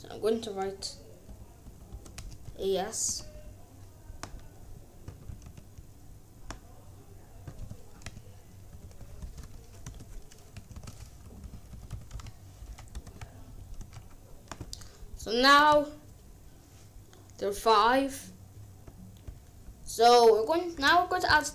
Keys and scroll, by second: 1.2 BackSpace, 1.9 BackSpace, 2.4 a, 3.1 s, 5.2 a, 5.5 s, 7.5-12.6 typing, 12.9 Return, 13.7 ctrl+s.